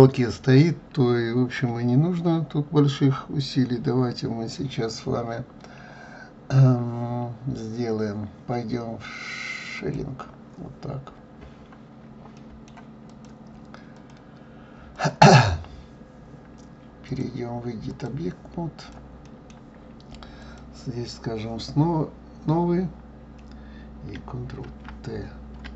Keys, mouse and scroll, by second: 9.9 click, 11.0 scroll down 1, 11.5 scroll up 1, 12.7-14.0 middle drag, 14.0 click, 15.2 click, 18.1 click, 19.2-19.7 middle drag, 20.6-24.8 drag, 24.8 ctrl+t.